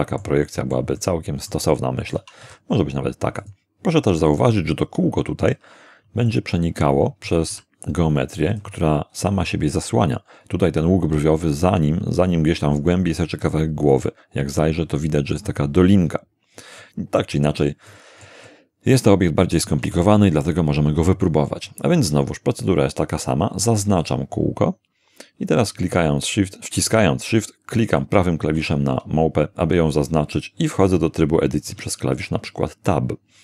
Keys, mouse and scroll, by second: 0.5 shift+middle click, 2.4 shift+g, 3.4 shift+click, 6.3-7.5 middle drag, 7.5 g, 8.5 click, 14.1-15.6 middle drag, 16.8-17.8 middle drag, 17.9-18.4 middle drag, 19.2-19.8 shift+middle drag, 28.0 shift+right click, 31.7 Tab.